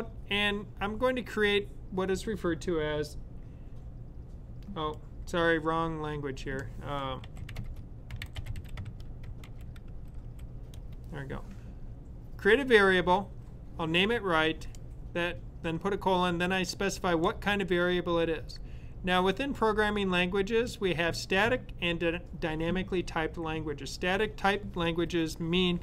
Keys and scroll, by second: 6.9-10.2 typing.